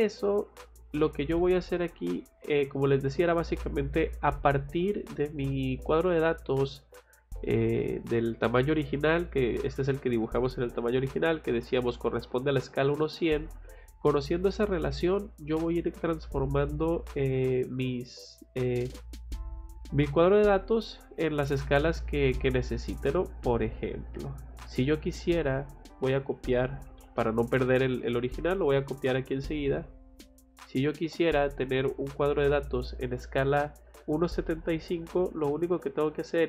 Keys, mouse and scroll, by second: 0.5 click, 0.8 click, 2.1 middle click, 17.4 middle click, 23.9 click, 25.0 click, 26.3 c, 26.9 o, 27.0 space, 28.2 click, 29.7 F8, 30.8 click, 31.0 Escape, 31.3 middle click, 33.5 click, 33.7 click.